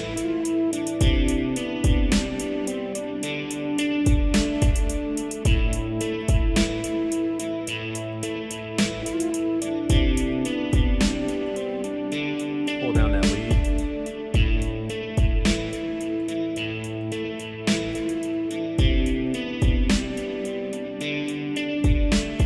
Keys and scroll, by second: 6.8 ctrl+s, 19.5 ctrl+s.